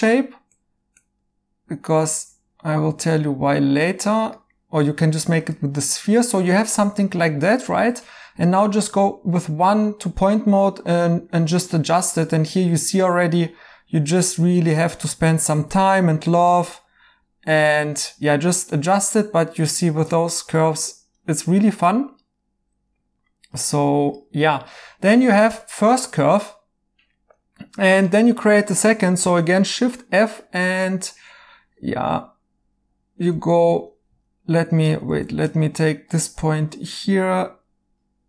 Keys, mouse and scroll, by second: 3.2 right click, 30.4 f, 34.5 Escape.